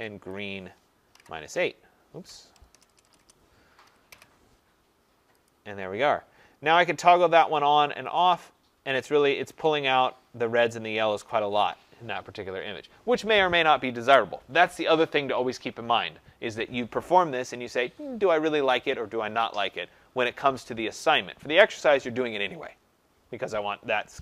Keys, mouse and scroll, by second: 0.3 click, 1.0 -, 2.7-4.0 typing, 5.4 click, 7.5 click, 8.1 click, 8.9 click, 9.6 click, 10.6 click, 11.2 click.